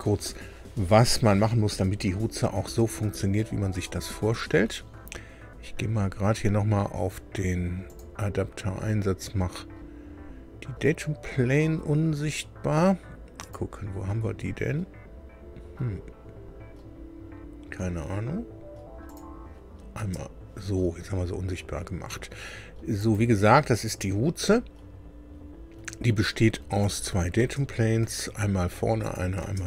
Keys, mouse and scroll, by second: 2.8-3.1 scroll up 2, 7.8 click, 13.4 click, 19.0 click, 19.9 space, 21.0-21.4 scroll down 2, 22.9 click, 24.1 scroll down 2, 26.8 click, 27.3 space, 28.0 space, 29.0 click, 29.4 space.